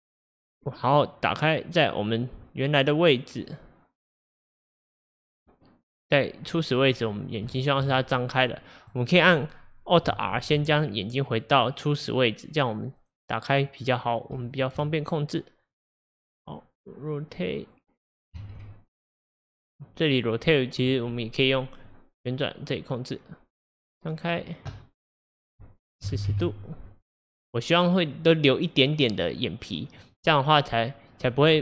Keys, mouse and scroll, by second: 0.1-6.1 drag, 6.5-7.4 scroll, 7.5-8.0 shift+middle drag, 8.0-8.6 scroll, 8.6 drag, 10.4 alt+r, 13.0 click, 14.5 shift+click, 15.7 shift+click, 18.4 ctrl+z, 21.9-30.2 drag.